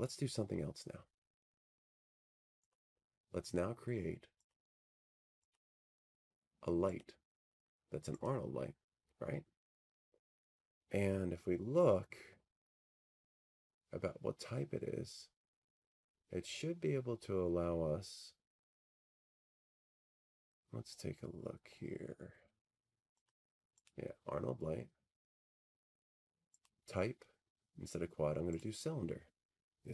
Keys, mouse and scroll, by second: 8.2 click, 10.2 click, 11.1 click, 12.7 click, 13.9 click, 19.5 middle click, 19.5-20.3 scroll down 4, 20.3-24.6 middle drag, 20.3 scroll, 20.3 scroll down 1, 20.5-20.8 scroll down 1, 20.8 scroll down 1, 20.9 scroll, 21.0-21.4 scroll down 1, 21.4 scroll down 1, 21.5 scroll down 1, 21.5 scroll down 1, 21.6-22.3 scroll down 1, 22.3 scroll down 1, 22.3 scroll down 1, 22.4-24.4 scroll down 1, 24.4 scroll down 1, 25.3 middle click, 25.3-26.1 scroll, 26.2-27.6 scroll, 26.9-28.9 middle drag, 28.9-29.9 drag.